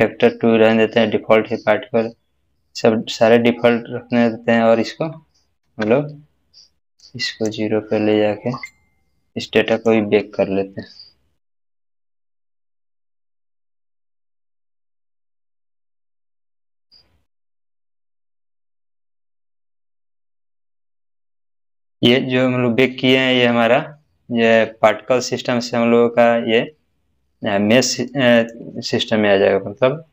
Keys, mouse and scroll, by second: 2.6 scroll up 1, 2.6-3.5 scroll down 1, 5.7 space, 7.0-7.6 drag.